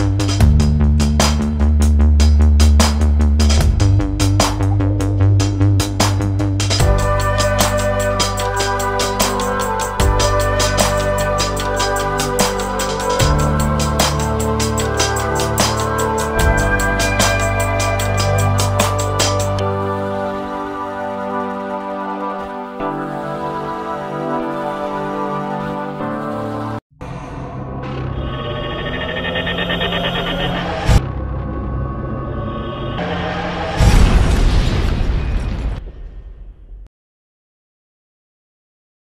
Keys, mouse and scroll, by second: 1.5 click, 3.8 click, 4.6-5.4 scroll down 1, 5.4-5.8 scroll down 1, 7.1-8.4 scroll down 1, 8.4 middle click, 17.8 click, 19.0 click, 21.2 click, 26.2 click.